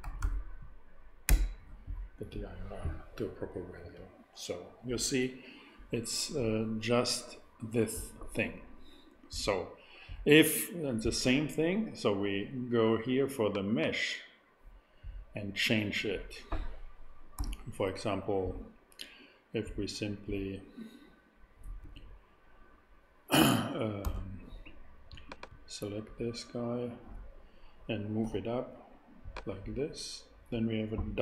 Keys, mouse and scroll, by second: 0.0 •, 0.2 i, 2.3 Return, 13.4 click, 14.5-15.6 drag, 17.3 a, 21.8 KP_3, 24.0 KP_1, 24.0 i, 25.1 super+i, 28.2 g.